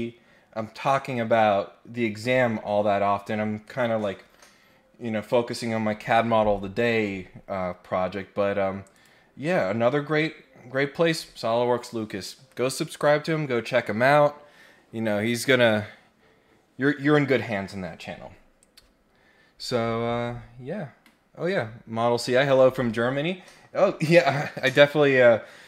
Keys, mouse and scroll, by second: 8.9 click, 10.1-10.6 scroll down 2.